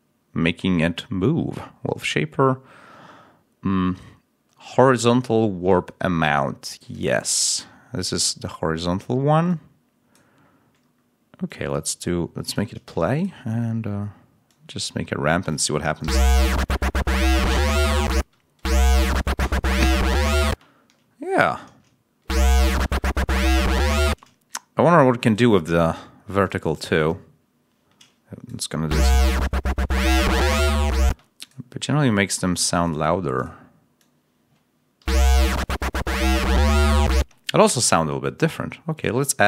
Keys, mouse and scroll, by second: 6.8 click, 9.3 click, 10.7 scroll down 1, 11.3-12.6 drag, 12.7 d, 13.0 click, 14.4-15.6 drag, 15.9 l, 18.0 space, 20.4 space, 20.6 ctrl+scroll down 2, 22.1 ctrl+space, 24.0 space, 25.1 click, 28.7 l, 30.9 space, 34.9 l, 37.0 space, 38.8 click.